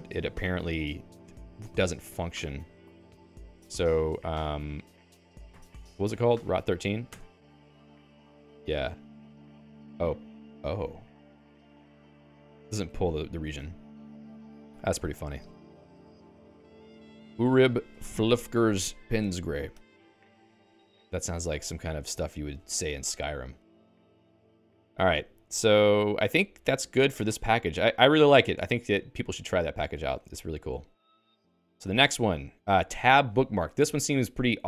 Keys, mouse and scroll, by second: 0.8 ctrl+space, 1.0-2.5 Right, 2.7 Right, 6.3 alt++, 6.6 Down, 6.7 Down, 7.1 Return, 10.8-17.5 typing, 14.1 Escape.